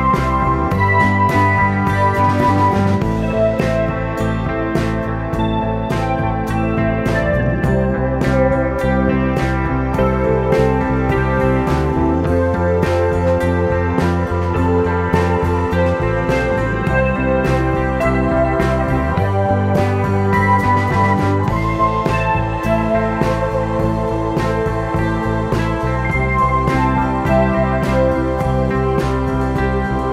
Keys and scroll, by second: 2.0 super+z.